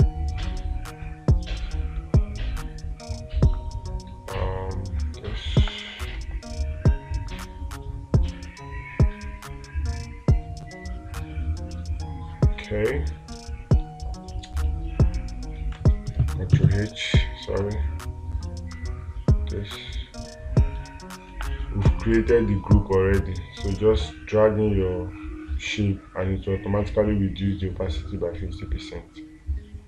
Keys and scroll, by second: 6.1 space, 21.8 space.